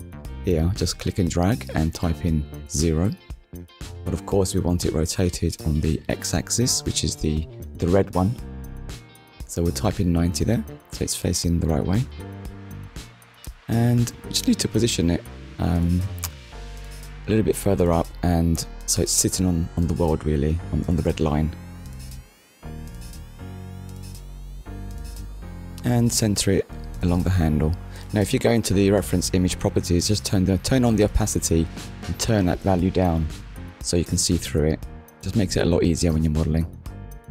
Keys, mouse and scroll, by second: 0.8 click, 3.1 Return, 4.2 middle click, 8.8 click, 10.9 Return, 13.3 KP_1, 15.6 click, 17.4 click, 20.8 click, 21.4 scroll up 1, 22.6 click, 25.7 click, 26.4 click, 30.4-30.8 scroll up 1, 31.2 shift+middle click, 32.4 click, 34.6 click.